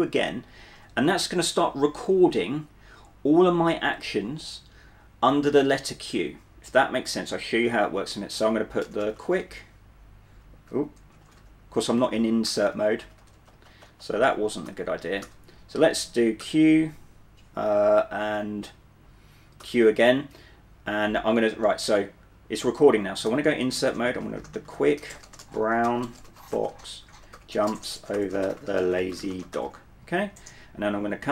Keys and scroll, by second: 0.9 typing, 8.7-15.3 typing, 16.5 q, 19.7 q, 23.4-30.0 typing.